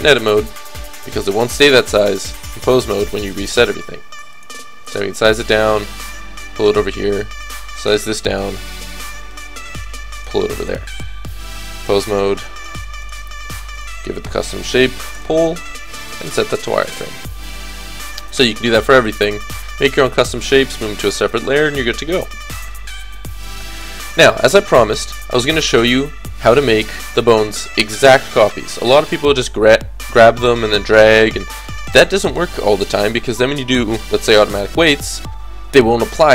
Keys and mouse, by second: 1.8 KP_3, 2.9 s, 4.6 g, 7.1-9.0 drag, 7.4 s, 8.8 g, 9.4 s, 10.3 g, 12.1 click, 17.1-18.6 middle drag, 17.6 a.